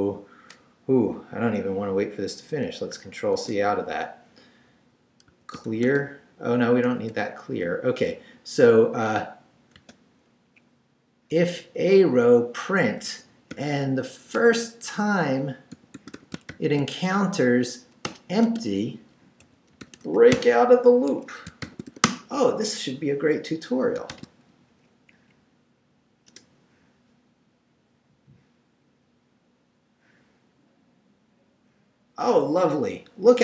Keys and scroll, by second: 3.3 ctrl+c, 5.0-6.8 typing, 9.8 space, 10.5 Up, 11.8 Down, 13.1 Escape, 13.5-17.0 typing, 18.1 Return, 18.4 Tab, 19.2-21.9 typing, 21.1 Escape, 22.0 Return, 24.1 shift+;, 24.7 shift+Up, 26.3 Return.